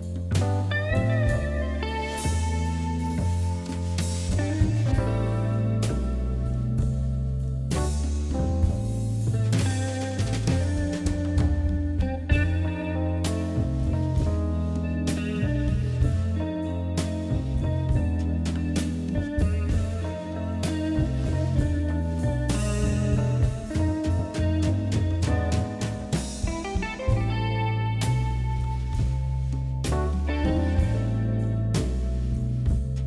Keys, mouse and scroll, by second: 0.0 click, 1.0 r, 1.9 e, 2.7 g, 4.1 s, 5.4 g, 6.5 s, 7.3 e, 8.0 r, 9.2 click, 9.9 g, 12.2 click, 13.1 e, 13.7 g, 14.5 scroll down 1, 14.8 click, 15.5 g, 16.5 click, 17.2 e, 18.2 g, 19.7 ctrl+r, 21.9 click, 22.9 e, 23.7 g, 24.6 scroll up 2, 24.8 shift+middle click, 25.4 ctrl+r, 26.3 ctrl+b, 27.1 click, 28.1 g, 29.0 scroll up 1, 29.1-30.2 scroll down 5, 30.2 shift+middle click, 30.7 shift+z, 30.8-31.1 scroll down 2, 31.1-32.0 scroll up 7, 32.0-33.0 scroll down 7.